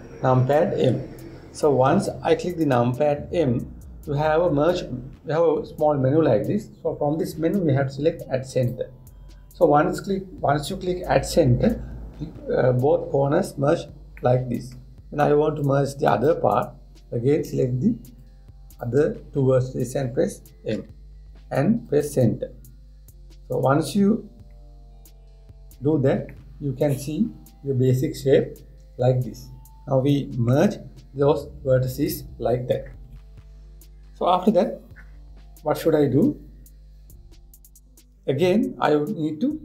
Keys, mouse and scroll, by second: 1.4 m, 14.7 scroll down 1, 14.9 middle click, 15.5-16.2 scroll up 1, 16.2 click, 18.8 shift+click, 21.4 m, 23.9-24.5 scroll down 1, 24.5 scroll up 1, 24.6-25.2 scroll down 2, 25.2 middle click, 26.1-26.5 scroll up 2, 27.0-30.1 middle drag.